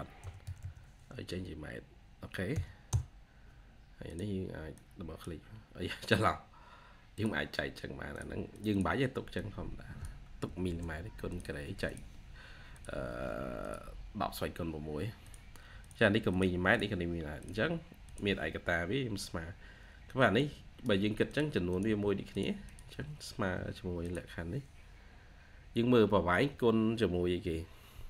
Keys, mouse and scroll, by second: 0.0-1.0 typing, 2.4 typing, 2.7 Return, 8.4 double click, 10.5 BackSpace, 16.2 double click, 21.6 double click, 21.7 typing, 22.5 double click, 23.3 typing.